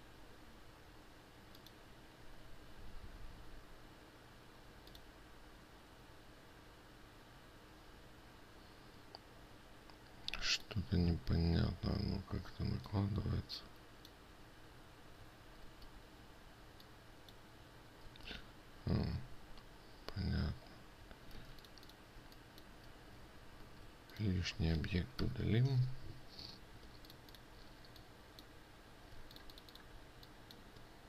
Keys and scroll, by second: 16.2 ctrl+z, 18.7 ctrl+z, 22.0 ctrl+space, 24.2 ctrl+2, 27.4 ctrl+space.